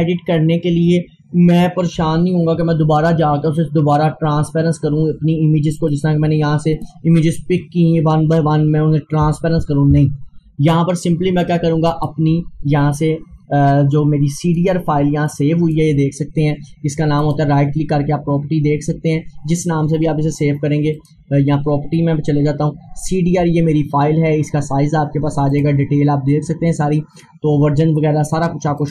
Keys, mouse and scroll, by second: 1.6 click, 5.8 click, 11.5-17.3 drag, 17.3 right click, 21.0 right click, 25.5 click, 25.7 click, 28.8 click.